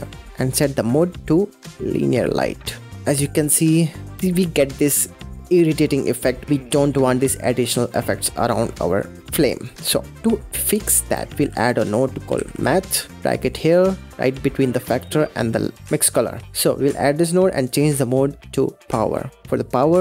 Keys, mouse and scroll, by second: 0.7-2.9 drag, 2.9-3.6 middle drag, 3.6-3.9 scroll up 6, 3.9-6.4 middle drag, 8.3-8.7 scroll down 6, 8.7-11.2 middle drag, 11.2 shift+a, 14.1 scroll up 6, 15.0-15.8 middle drag, 15.8 click, 16.5 click, 17.3 click, 17.6-19.5 drag.